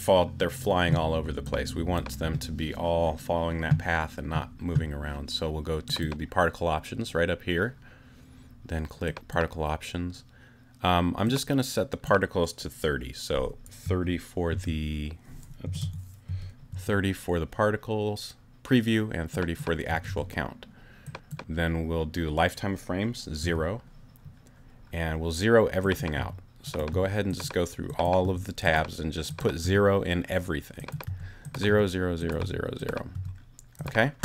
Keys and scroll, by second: 13.8 2, 14.5 0, 15.7 BackSpace, 16.3 3, 16.7 0, 19.6-20.5 typing, 23.4 0, 26.2 0, 28.2 0, 29.6 0, 31.1 0.